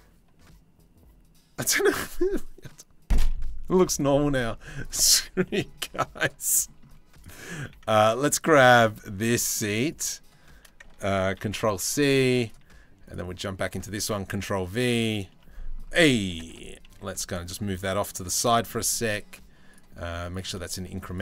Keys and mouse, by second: 13.8 ctrl+v, 14.2 click, 14.9-15.3 drag, 15.9 g, 19.4 click, 20.4 shift+middle click.